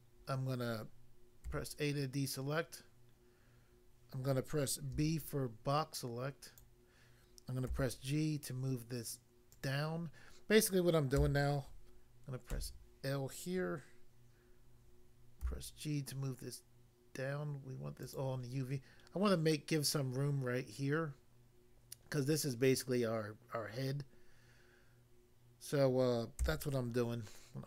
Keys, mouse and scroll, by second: 1.4 a, 4.9 b, 5.2 click, 6.6 click, 7.7 g, 9.5 click, 9.7 click, 11.2 a, 12.5 l, 15.4 g, 18.1 click, 18.2 click, 26.4 a.